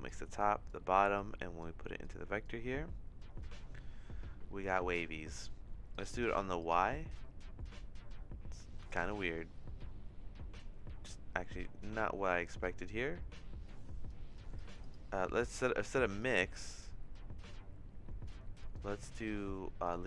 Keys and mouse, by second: 0.4 click, 1.2 click, 2.0 click, 5.2 middle click, 6.0 click, 8.9-14.1 drag, 14.5 click, 14.9-16.0 drag, 16.1 click, 16.6-18.2 drag, 18.7-19.9 drag.